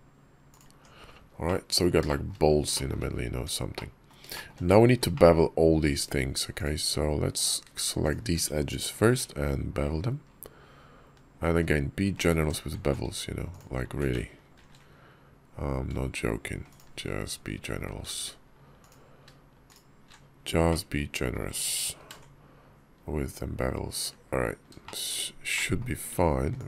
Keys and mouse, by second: 0.5 Tab, 1.3 click, 1.9 shift+click, 2.6 shift+click, 3.2 Tab, 3.6 click, 4.2 shift+click, 5.0 click, 6.4 alt+click, 7.8 alt+shift+click, 8.8 ctrl+b, 13.3 alt+click, 14.4 ctrl+b, 18.6 alt+click, 20.5 click, 21.8 ctrl+b, 24.7 shift+click, 25.4 click.